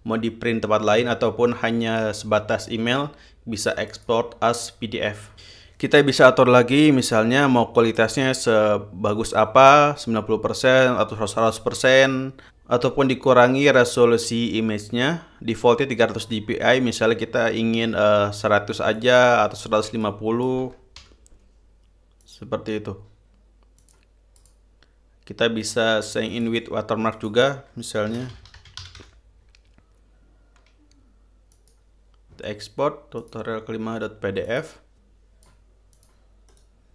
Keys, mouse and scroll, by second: 4.5 click, 19.5 click, 20.6 click, 21.2 1, 21.5 5, 22.8 click, 24.4 click, 24.9 click, 26.8 click, 27.7 click, 28.4-30.1 typing, 32.1 click, 33.8 click, 35.0-36.2 drag, 36.5 click.